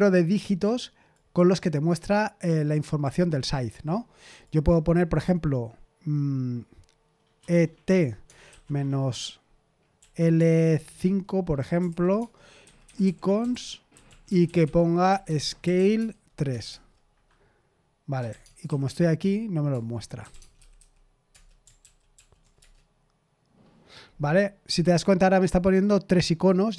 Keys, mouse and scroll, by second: 4.4-7.4 drag, 7.4-8.4 typing, 9.9-16.7 typing, 17.9-21.2 typing, 19.7 Return, 21.3 Return, 21.8 ctrl+p, 22.1 ctrl+p, 22.3-23.3 typing.